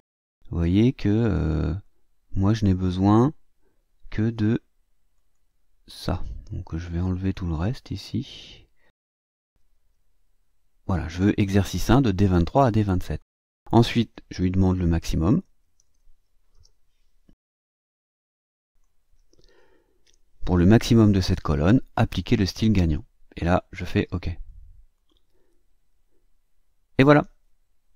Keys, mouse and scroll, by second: 1.2 click, 1.8 click, 5.1 click, 6.6 click, 7.9-9.1 drag, 9.7 BackSpace, 15.0-16.4 typing, 18.6 click, 20.0 ), 24.0 click, 24.9 click.